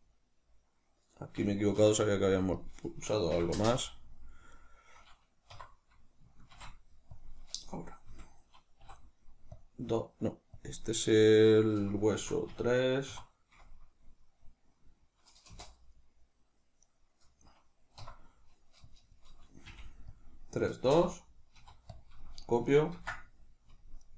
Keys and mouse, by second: 1.6 F2, 4.4 right click, 5.4 F2, 15.8 right click, 16.8 right click, 17.9 F2.